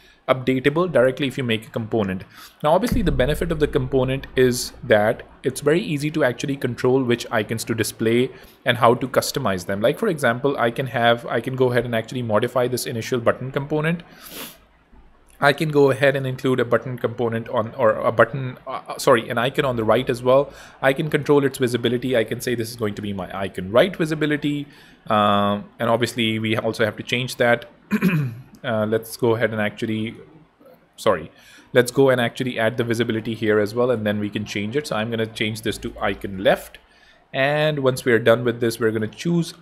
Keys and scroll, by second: 9.5 super+d, 10.8 super+z, 14.7 super+d, 21.9 super+a, 22.3-23.7 typing, 29.8 Escape, 35.7 shift+super+a, 35.8-37.0 typing.